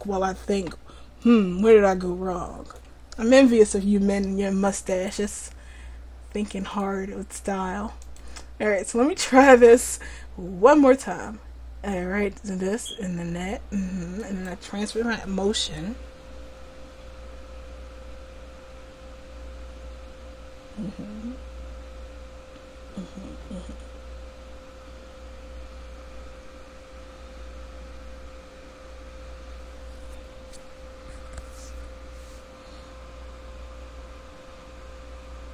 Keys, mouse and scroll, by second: 1.3-8.0 drag, 8.7-10.4 middle drag, 14.2-35.5 drag.